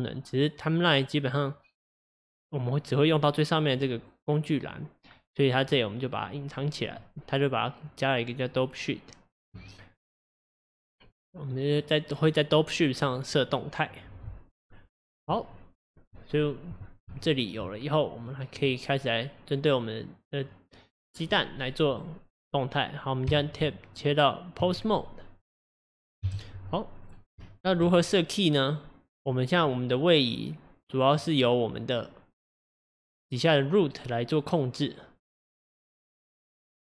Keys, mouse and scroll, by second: 17.1-18.2 shift+middle drag, 18.2 click, 18.7-24.6 middle drag, 24.6 Tab, 26.2 KP_1, 27.0-27.4 scroll up 4, 27.4-29.3 shift+middle drag, 29.3 Left, 29.6-36.8 middle drag.